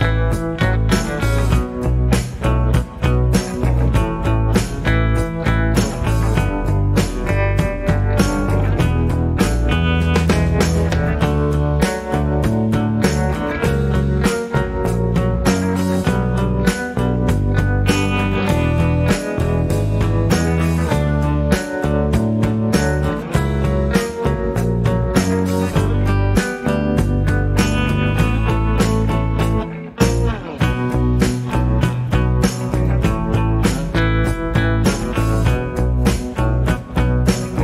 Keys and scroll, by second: 27.2 shift+a, 30.2 shift+a, 32.2 shift+a, 35.7 h.